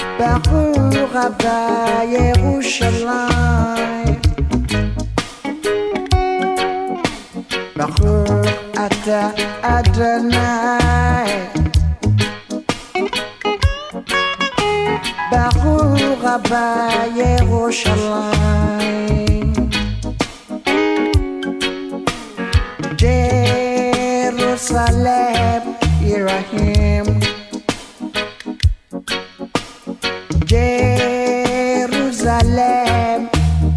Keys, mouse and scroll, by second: 2.3 ctrl+click, 4.6 click, 8.5 alt+click, 10.6-11.6 drag, 12.9 ctrl+click, 15.4 click, 22.9 click, 26.2 ctrl+click, 28.2 click, 29.7 ctrl+click, 32.9 click.